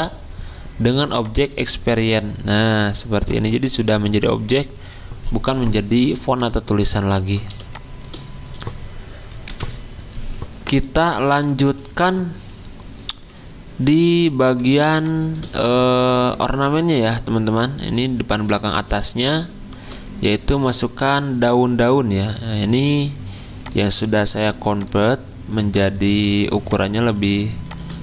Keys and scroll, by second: 9.5 F10, 19.0 alt+Tab, 19.7 alt+Tab.